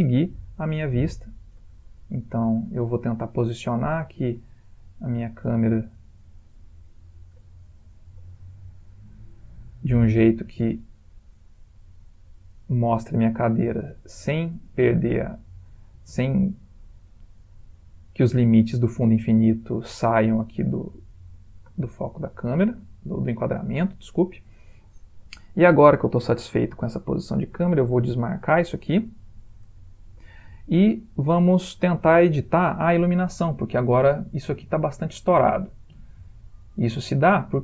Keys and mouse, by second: 1.1 ctrl+middle click, 2.0 shift+middle click, 3.0 middle click, 4.0 ctrl+middle click, 4.7 middle click, 7.7 ctrl+middle click, 10.6 middle click, 13.1 middle click, 15.0 r, 21.5 g, 23.9 g, 27.5 typing, 28.3 click, 29.9 ctrl+space, 31.0 shift+middle click, 32.2 ctrl+middle click.